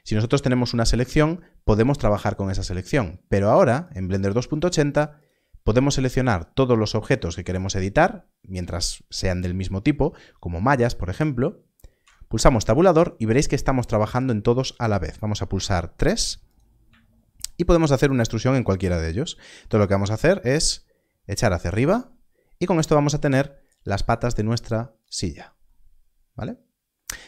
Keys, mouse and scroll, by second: 0.8-2.8 scroll, 2.8 Tab, 3.8 shift+click, 15.5 3, 16.5 click, 17.4 shift+click, 19.2 scroll down 1, 19.9 e, 25.0 click.